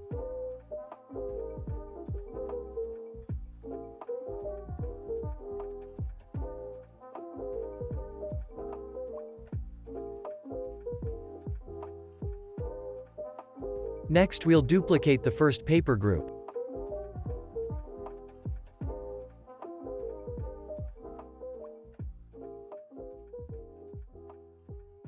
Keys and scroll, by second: 7.4 super+s, 14.1 super+s, 16.0 super+d, 17.9 super+], 19.5 super+[.